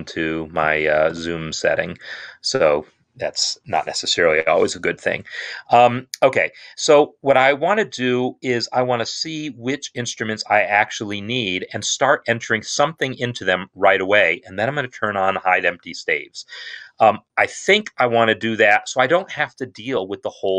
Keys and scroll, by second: 1.5 Tab.